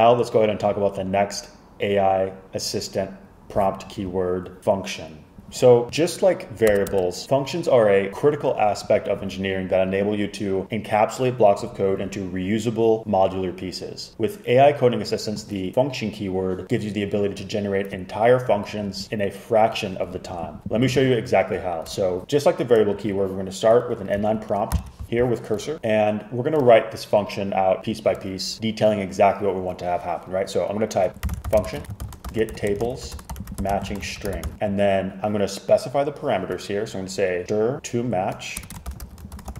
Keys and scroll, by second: 5.4 Escape, 6.8 Return, 7.0 Return, 24.8 super+k, 31.1-34.9 typing, 37.2-39.5 typing.